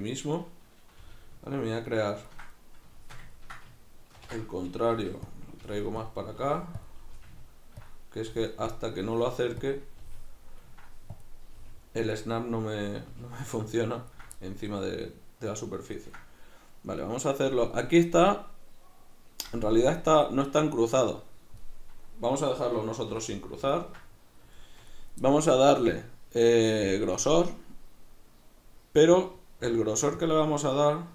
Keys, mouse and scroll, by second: 0.3 right click, 1.0 g, 2.3 ctrl+click, 3.0-5.3 shift+middle drag, 4.2 ctrl+i, 5.3 click, 5.6 g, 6.1 click, 6.4 g, 6.9 click, 7.2 g, 8.0 click, 8.3 g, 8.8 click, 9.1 g, 9.8 click, 10.0 g, 11.3 click, 11.6 g, 12.2 click, 13.2 g, 14.2 ctrl+click, 14.4-26.9 middle drag, 26.9-31.1 drag.